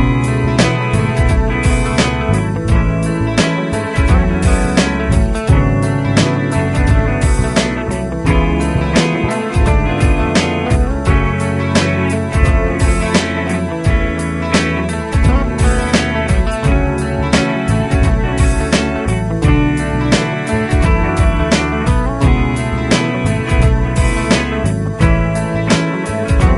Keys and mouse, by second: 1.8 F4, 4.2 double click, 8.2 double click, 9.7 Caps_Lock, 10.5-11.7 typing, 13.5 double click, 17.9 typing, 19.5 BackSpace, 23.1 Right, 25.3 space.